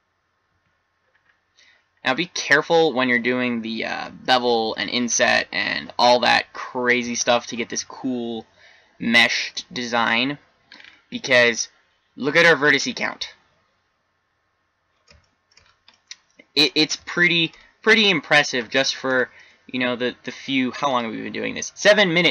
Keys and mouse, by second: 0.5 Tab, 4.0-5.3 middle drag, 13.2-16.7 middle drag.